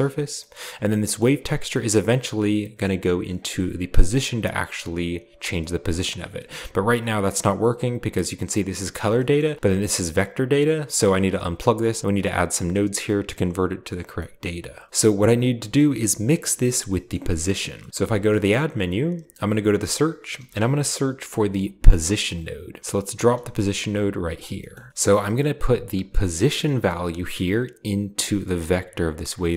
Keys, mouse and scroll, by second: 0.3 middle click, 0.5-1.4 scroll up 1, 2.1-5.3 drag, 5.4-6.5 scroll down 1, 7.6-9.0 scroll up 1, 9.0-9.7 scroll down 1, 10.8-12.2 drag, 11.7-12.2 scroll down 1, 14.1 middle click, 15.0 middle click, 15.2-16.1 drag, 17.7-18.2 middle drag, 17.7-18.2 scroll down 1, 18.1 shift+a, 19.6 click, 20.4 click, 20.4 typing, 22.3 click, 23.1-24.9 drag, 23.3-23.8 scroll down 1, 24.7 middle click, 25.0-25.4 middle drag, 25.0-25.7 scroll up 1, 25.9-27.2 drag, 27.5 click, 28.7-29.1 drag, 29.3 click.